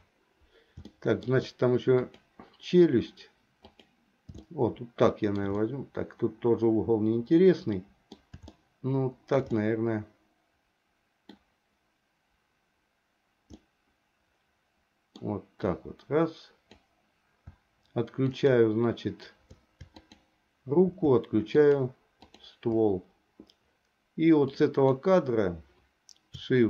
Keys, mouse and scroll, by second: 0.0 KP_7, 1.1 shift+middle click, 2.2 click, 3.8 click, 4.6 shift+middle click, 5.9-8.4 middle drag, 8.6 shift+middle click, 9.7-11.6 middle drag, 13.7-15.4 middle drag, 15.9-17.0 drag, 18.4 shift+click, 20.0 shift+click, 21.6 shift+click, 22.4 shift+click, 24.6 click.